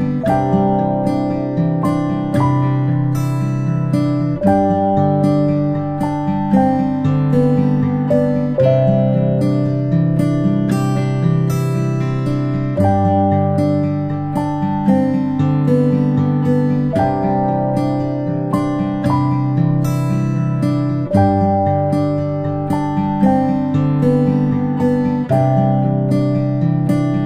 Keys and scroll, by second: 3.9-4.3 ctrl+space, 5.9 p, 8.9 p, 18.3 ctrl+z, 18.5 ctrl+z, 23.4 a.